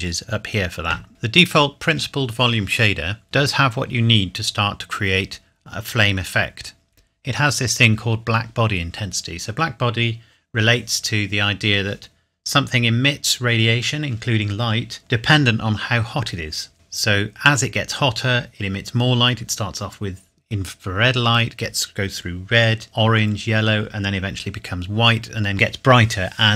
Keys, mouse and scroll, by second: 1.1 click, 1.2-3.1 scroll up 1.